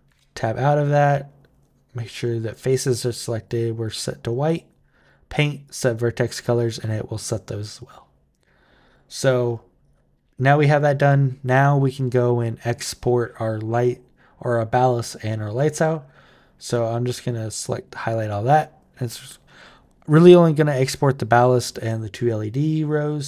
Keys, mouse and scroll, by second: 3.1 click, 4.2 click, 4.7 click, 5.4 click, 8.6 click, 9.6 click, 16.6 click, 22.6 click.